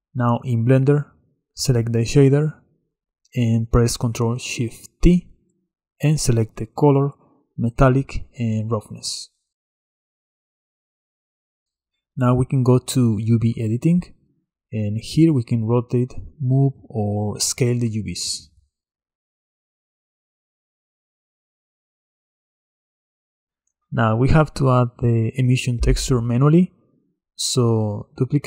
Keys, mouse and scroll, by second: 2.0 click, 4.0 click, 14.7 r, 16.9 g, 20.9 s, 23.6 click, 26.9 click, 27.8 click.